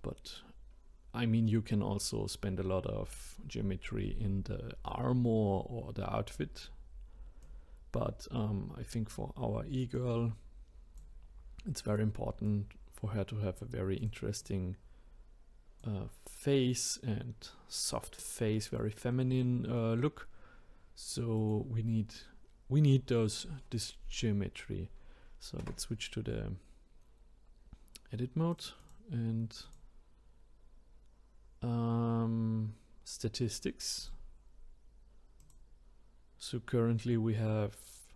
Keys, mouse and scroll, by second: 7.4 click, 9.9 click, 11.9 click, 12.4 click, 14.0 click, 17.2-18.4 scroll down 2, 18.4-21.4 middle drag, 21.4 click, 25.6 Tab, 28.5 click, 29.6-32.8 drag.